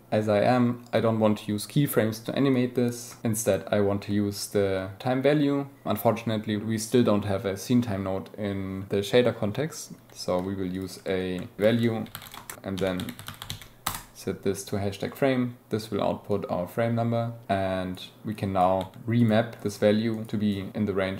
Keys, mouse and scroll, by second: 2.5 click, 10.7 click, 12.5-13.9 drag, 17.5-18.6 drag, 19.1 click, 19.8-20.3 drag, 20.3 middle click.